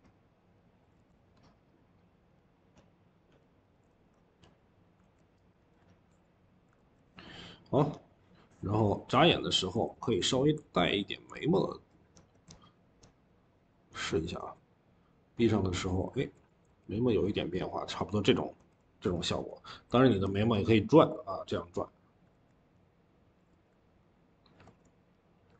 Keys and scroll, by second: 0.8 ctrl+z, 3.8 ctrl+z, 5.4 Escape, 5.6 Escape, 6.6 ctrl+z, 9.3-10.3 typing, 22.2 ctrl+z, 23.4 ctrl+z, 24.5 ctrl+z, 25.4 ctrl+z.